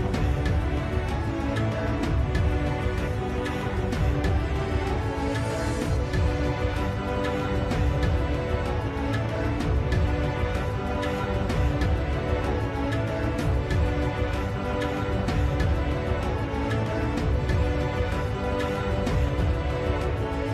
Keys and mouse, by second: 1.7 s, 4.1 middle click, 5.1-6.3 middle drag, 10.1 KP_7, 11.5 s.